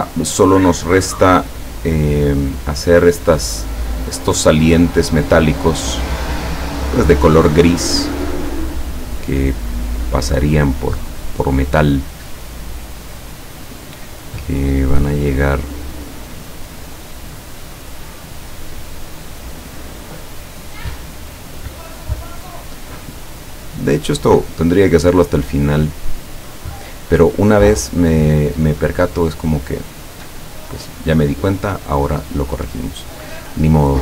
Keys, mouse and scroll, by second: 6.6 click, 15.4 click, 17.6 click, 18.4 click, 19.3 click, 20.4 click, 21.3 click, 22.1 click, 25.0 click, 26.5 click, 29.1 click, 30.3 click, 30.7 click.